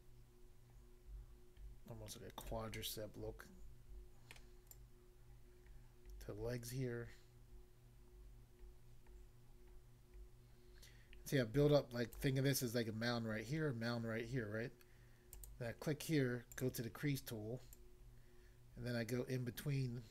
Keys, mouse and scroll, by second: 2.4 click, 2.8 middle click, 4.4 middle click, 4.7 click, 12.2 click, 15.3 click, 15.5 click, 16.6 click, 16.7 click, 17.8 click.